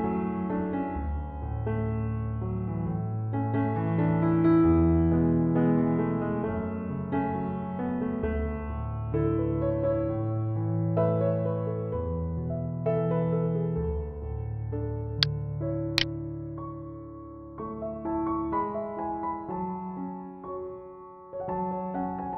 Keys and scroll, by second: 6.7 ctrl+d, 18.3 ].